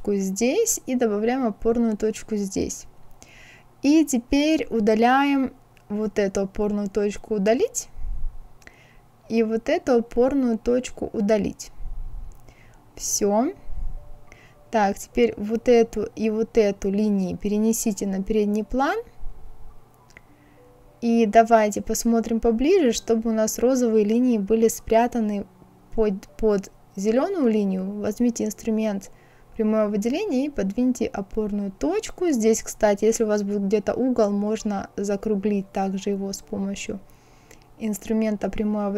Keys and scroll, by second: 6.9 Delete, 10.9 Delete.